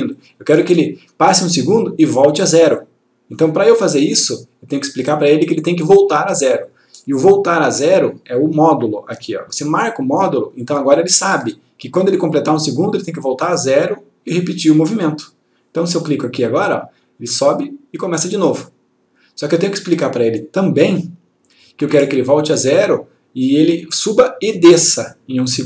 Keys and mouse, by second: 4.2-5.4 click, 10.3 click, 16.6 click.